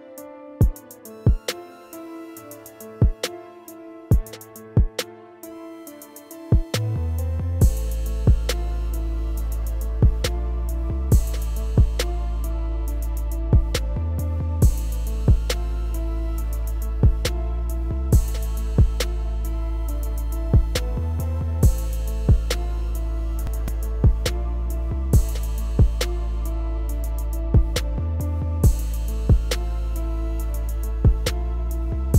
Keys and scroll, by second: 13.2 ctrl+s.